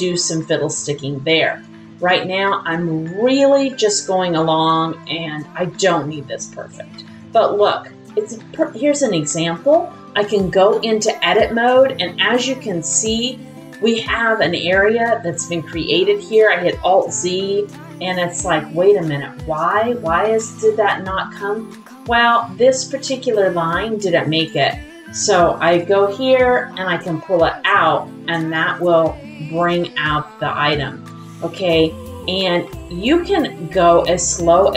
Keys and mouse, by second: 0.0 click, 0.4 click, 1.2-3.1 drag, 4.9-6.9 drag, 6.9 middle click, 7.7 shift+middle click, 9.2 middle click, 10.7 click, 11.7 middle click, 12.0 shift+middle click, 12.9 middle click, 13.6 shift+middle click, 13.9 middle click, 16.4 alt+z, 17.3 shift+middle click, 17.9-19.7 middle drag, 20.2 middle click, 21.7 middle click, 24.5-26.7 drag, 28.5 typing, 28.6 middle click, 29.8-31.4 middle drag, 32.3 click, 32.6 middle click.